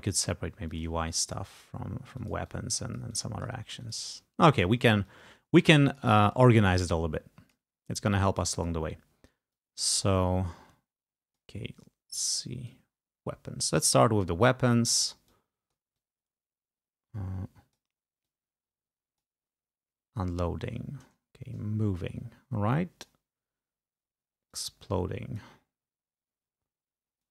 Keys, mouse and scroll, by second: 0.8 click, 1.4 shift+click, 3.1 click, 3.9 click, 4.6 ctrl+click, 5.2-8.0 ctrl+drag, 8.6 click, 9.7-11.6 drag, 12.8-14.2 drag, 15.4 click, 16.4-18.0 drag, 18.4-19.6 drag, 22.1-23.4 drag, 24.7-25.8 drag.